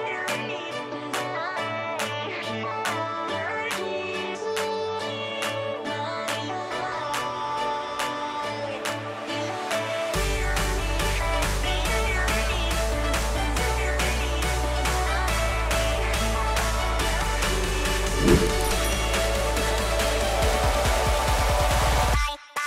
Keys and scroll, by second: 0.5 space.